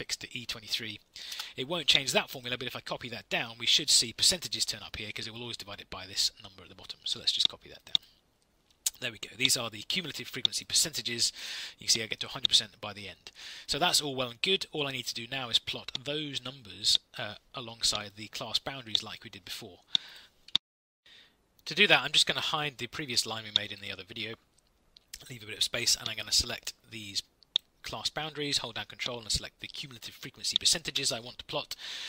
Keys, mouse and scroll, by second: 1.2 Return.